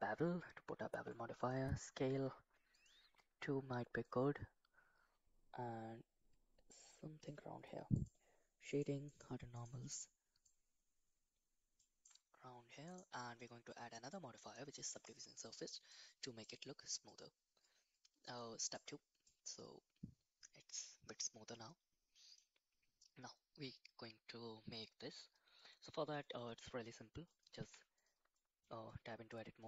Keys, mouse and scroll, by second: 0.9 ctrl+a, 2.7 click, 4.0-7.2 shift+drag, 7.9 click, 8.6 click, 9.0 click, 9.5 click, 10.4-12.0 shift+drag, 12.8-15.1 drag, 15.9-16.4 middle drag, 18.7 click, 19.2-21.0 middle drag, 21.5-22.3 middle drag, 25.5-26.1 middle drag, 26.2 middle click, 27.3 click, 27.6 Tab, 28.3 middle click, 28.9 middle click.